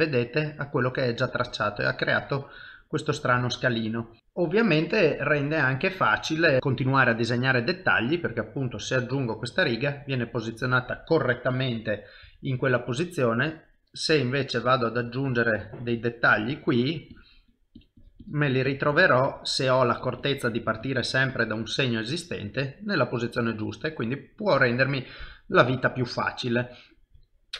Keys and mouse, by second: 3.3 ctrl+z, 3.7 middle click, 4.5 shift+middle click, 5.0 middle click, 6.5 KP_1, 7.2 click, 8.4 middle click, 12.2 KP_1, 13.4 click, 13.8-21.6 click, 21.6 middle click.